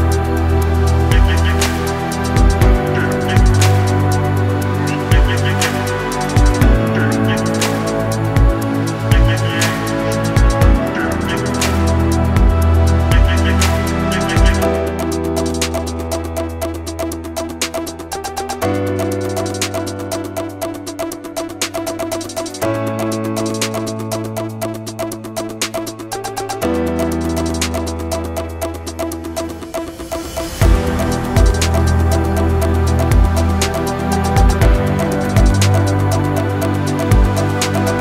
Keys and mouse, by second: 0.0-1.3 typing, 2.0 shift+drag, 2.8 ctrl+shift+b, 5.9 shift+click, 6.0 middle click, 6.2 a, 6.7 b, 7.5-9.4 drag, 9.6 ctrl+r, 11.0 a, 11.2 b, 12.5-13.9 shift+drag, 14.4 b, 15.0-16.0 shift+drag, 16.2 b, 17.1-18.5 shift+drag, 18.9 a, 19.4 shift+middle click, 19.9 shift+click, 21.1 shift+click, 21.6 ctrl+r, 24.5 a, 24.8 b, 25.5 shift+click, 26.3-27.6 shift+drag, 27.7 b, 28.8 shift+click, 29.8 b, 30.7-31.8 shift+drag, 32.0 b, 32.9-34.6 drag, 35.3 a, 35.9-36.6 shift+drag, 37.0 ctrl+r.